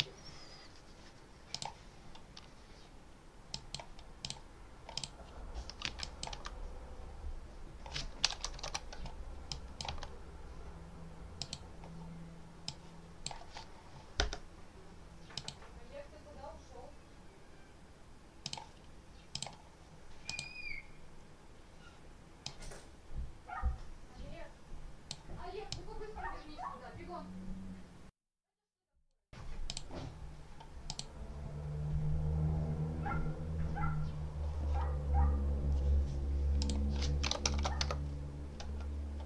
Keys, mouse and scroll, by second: 1.4 click, 3.4 click, 4.1 click, 4.8 click, 5.9 click, 6.2 1, 8.2 BackSpace, 8.4 2, 9.4 click, 9.8 1, 11.3 click, 12.5 click, 15.2 click, 18.3 click, 19.2 click, 20.2 click, 22.3-25.2 drag, 25.6-29.2 drag, 29.6 click, 30.0 scroll down 1, 30.8 click, 36.5 click, 36.9-37.8 typing.